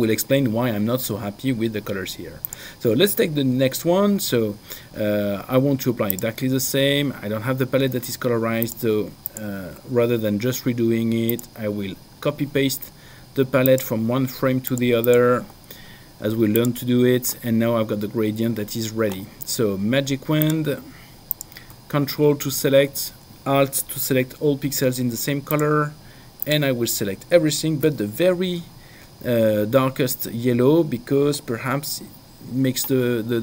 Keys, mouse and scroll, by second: 6.4 click, 8.7 click, 11.6 click, 13.9 click, 16.8 click, 20.5 click, 25.9 ctrl+alt+click.